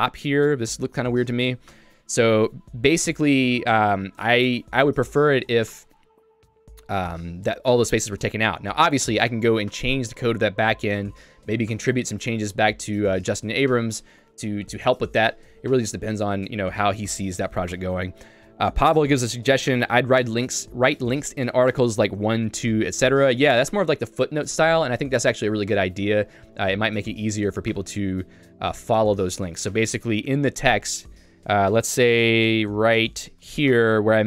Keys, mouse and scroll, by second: 0.9 k, 30.4 j, 30.9 ctrl+d, 31.3 ctrl+d.